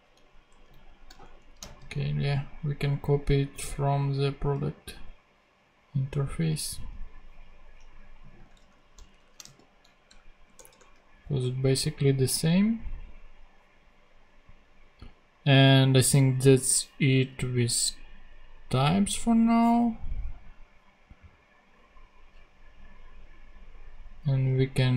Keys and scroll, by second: 0.5 Up, 0.7 super+Left, 1.2 shift+super+Down, 1.6 shift+super+Down, 1.6 shift+super+c, 2.6 super+c, 8.6 super+Left, 9.1 shift+super+Down, 9.3 shift+super+Down, 9.4 shift+super+v, 10.1 super+\, 10.5 BackSpace.